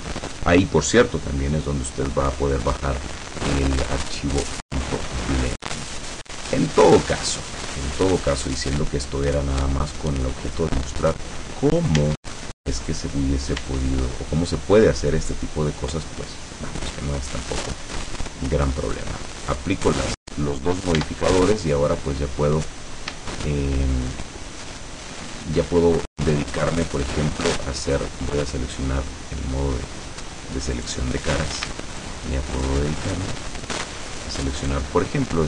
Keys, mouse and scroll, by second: 3.9-7.0 middle drag, 10.1-10.5 scroll up 1, 12.1 Tab, 13.7 Tab, 15.9 click, 18.0 click, 19.5 click, 21.1 Tab, 23.4 shift+middle click, 27.1 click, 30.8 right click, 32.0 shift+right click, 32.6 shift+right click, 33.1 shift+right click, 34.7 shift+right click.